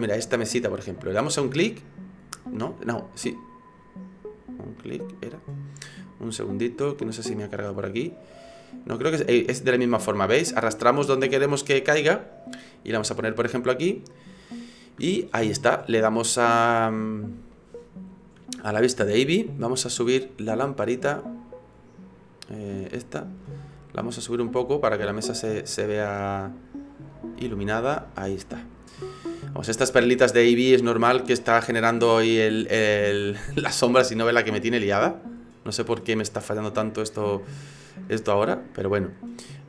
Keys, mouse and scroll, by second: 4.2-4.8 scroll down 3, 4.8 middle click, 6.7 click, 7.2 scroll down 2, 7.7 middle click, 16.2 click, 16.9-17.6 scroll up 5, 17.6 middle click, 18.9 shift+middle click, 19.6-20.0 scroll down 3, 22.9 click, 24.4 click, 27.1 click, 33.7 shift+middle click, 35.4-35.8 scroll up 2, 36.1 middle click, 38.1 click, 39.5 right click.